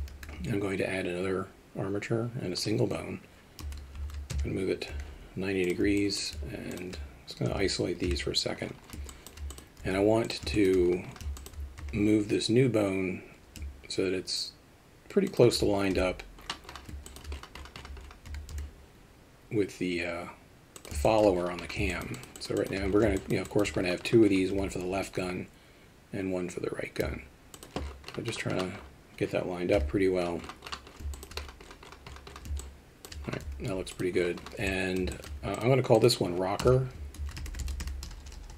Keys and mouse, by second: 0.1 shift+a, 4.9 g, 6.0 alt+middle drag, 6.7 shift+click, 7.5 KP_Divide, 8.0 KP_3, 9.1 alt+shift+middle drag, 9.5 click, 9.8 z, 10.5 shift+middle drag, 11.3 alt+shift+middle drag, 11.8 g, 15.9 KP_7, 17.1 alt+shift+middle click, 18.2 g, 21.1 middle click, 22.0 alt+shift+middle drag, 22.3 shift+middle drag, 22.5 alt+shift+middle drag, 23.2 alt+shift+middle drag, 23.5 alt+shift+middle click, 29.7 KP_3, 31.1 middle drag, 32.6 alt+shift+middle click, 33.4 z, 34.7 alt+middle drag, 35.1 alt+shift+middle click, 35.5 click, 38.2 BackSpace, 38.3 BackSpace.